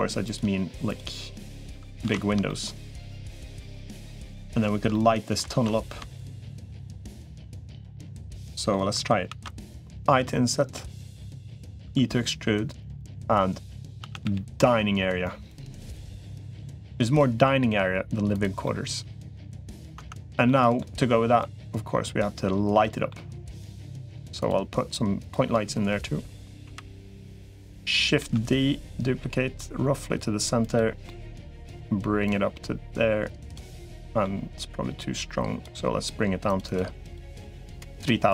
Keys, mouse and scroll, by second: 1.2 shift+click, 2.0 ctrl+z, 2.3 middle click, 4.7 middle click, 5.4 ctrl+z, 6.0 shift+click, 6.8 shift+click, 7.4 middle click, 8.1 middle click, 9.2 ctrl+s, 9.8 i, 11.8 e, 13.8 a, 14.0 g, 15.8 g, 18.5-19.7 middle drag, 19.8 Tab, 20.3 middle click, 21.2 middle click, 22.6 middle click, 26.6 KP_7, 28.2 shift+d, 30.9 middle click, 32.2-33.4 drag, 33.5 middle click, 35.0 click, 36.4-38.0 drag.